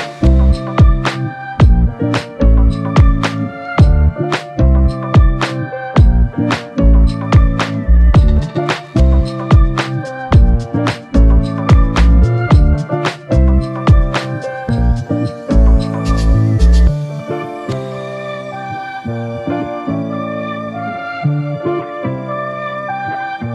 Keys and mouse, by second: 2.8 ctrl+click, 4.5 q, 5.3 alt+click, 15.3 double click.